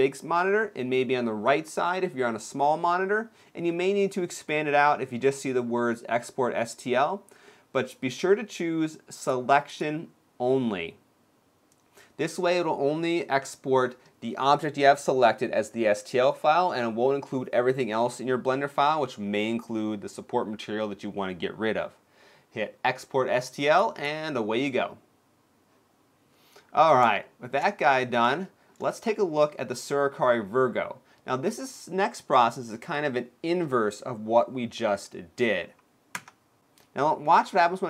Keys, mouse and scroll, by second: 25.0 click, 26.0 click, 26.0-26.5 scroll down 2, 26.9 shift+middle click, 27.6-27.9 scroll down 2, 28.1 shift+middle click.